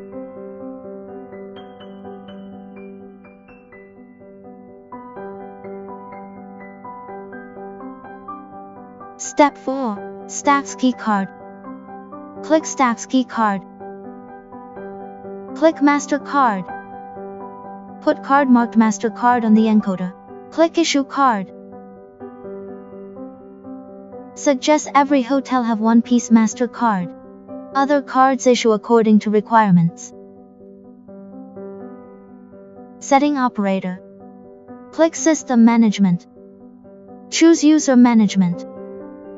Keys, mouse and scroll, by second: 6.8 click, 8.7 click, 14.3 click, 16.4 click, 22.3 click, 26.3 click, 31.1 click, 37.3 click.